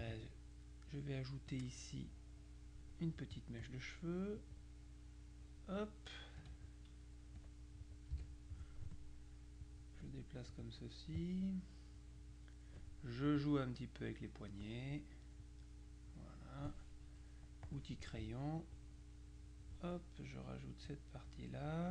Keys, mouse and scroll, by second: 1.6-3.4 drag, 4.5-6.1 drag, 6.5 F2, 7.5 click, 8.2 Delete, 9.7 click, 10.6 click, 12.0-13.3 drag, 15.5 click, 17.7 click, 18.7-20.3 drag, 20.9 click.